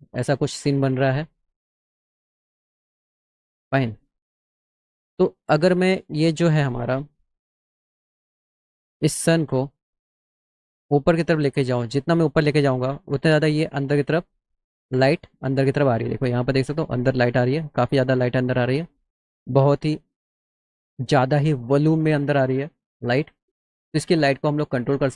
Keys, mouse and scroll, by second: 1.5-3.0 drag, 3.8 middle click, 6.0 middle click, 6.8 middle click, 7.9 click, 10.2-12.9 drag, 23.3 click.